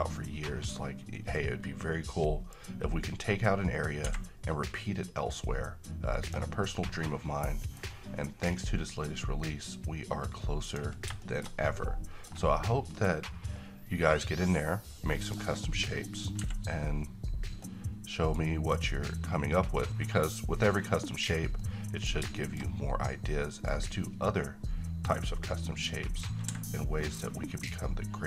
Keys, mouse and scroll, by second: 0.2-0.8 middle click, 1.2 scroll up 1, 2.6-6.6 drag, 6.7-8.0 middle drag, 10.6 click, 11.2-12.2 middle drag, 13.5-15.6 drag, 16.4 `, 17.7-18.6 middle drag, 21.1 click, 21.6-22.2 middle click, 23.7-28.2 drag.